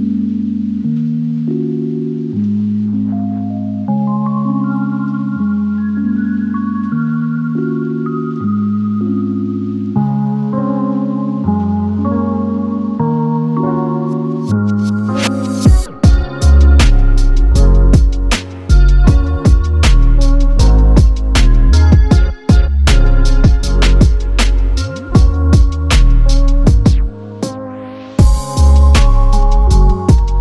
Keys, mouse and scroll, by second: 0.3-0.9 scroll, 0.9 scroll up 1, 1.1 click, 1.3-1.7 scroll down 1, 1.8 click, 4.4 click, 8.0 click, 13.2 0, 13.7 click, 16.1-16.5 typing, 17.6 click, 18.2 0, 18.7 click, 25.8 typing, 26.3 click, 28.0 click.